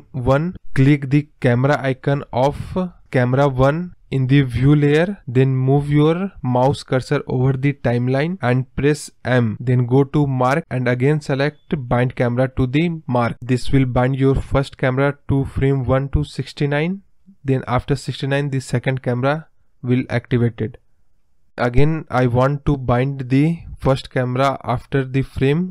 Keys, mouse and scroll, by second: 3.4 click, 6.5 m, 7.8-10.9 drag, 13.6 space, 23.7 space.